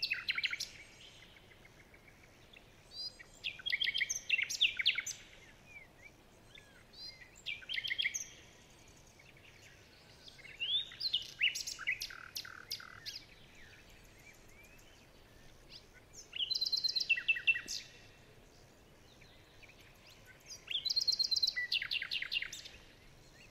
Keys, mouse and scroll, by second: 2.8 alt+scroll up 2, 8.8 shift+scroll down 2, 10.2-10.6 shift+scroll down 1, 10.7-11.4 shift+scroll up 2, 11.4-13.1 shift+scroll up 1, 16.7 alt+scroll up 1, 17.3 ctrl+click, 18.7 ctrl+click, 20.2 ctrl+a, 22.9 ctrl+z, 23.0 ctrl+z.